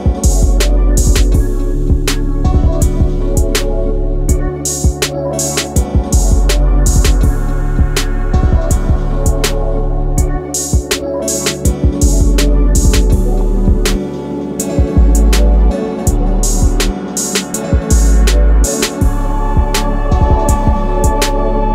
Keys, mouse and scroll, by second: 0.0-1.4 typing, 2.2 Return, 3.2-3.7 scroll down 1, 3.7 click, 4.2-4.7 scroll up 1, 6.0-6.9 scroll up 1, 6.9-7.3 scroll down 1, 9.2 click, 9.7 scroll up 1, 10.7-11.2 scroll down 1, 14.4 click, 15.1 scroll up 1, 17.2 click, 20.0 click.